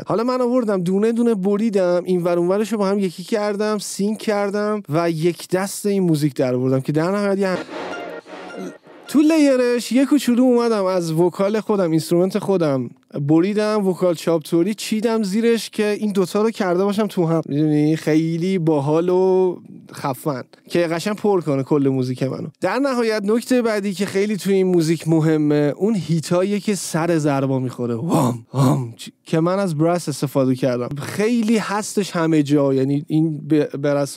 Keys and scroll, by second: 7.5 space.